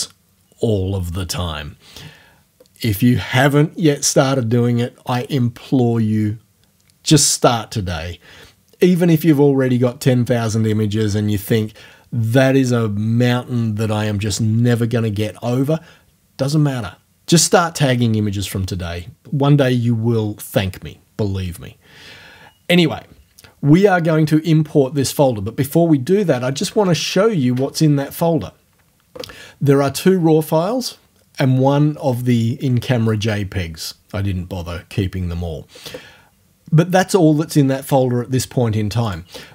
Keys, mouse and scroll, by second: 26.6 alt+Tab, 39.1 click.